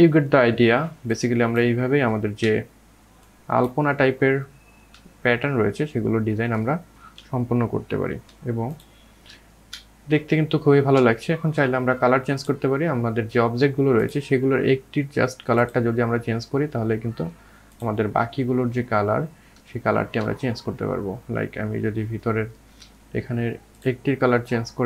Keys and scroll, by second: 5.3 ].